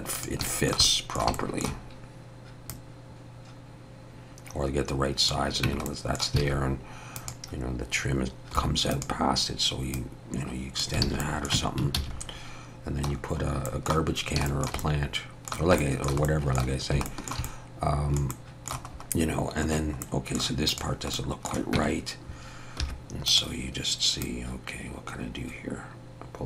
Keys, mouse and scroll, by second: 0.1 click, 0.5 shift+middle click, 0.5 shift+middle click, 0.8 middle click, 1.3 shift+middle click, 2.7 click, 5.7 Tab, 5.9 middle click, 6.4 alt+a, 7.2 click, 8.6 3, 8.9 click, 9.9 click, 11.0 alt+a, 11.2 middle click, 11.6 Tab, 12.0 alt+a, 12.1-12.9 scroll up 1, 12.9 scroll up 1, 13.1-13.5 scroll down 3, 13.7 middle click, 14.2 scroll down 1, 14.5 shift+middle click, 14.8 middle click, 15.8 shift+middle click, 16.2 middle click, 16.7 scroll down 2, 17.1 shift+middle click, 17.4 middle click, 18.3 middle click, 18.5 shift+middle click, 18.9-19.3 scroll up 2, 20.0 middle click, 20.7 click, 21.1 middle click, 21.8 Tab, 22.8 2, 23.3 click, 24.2 click.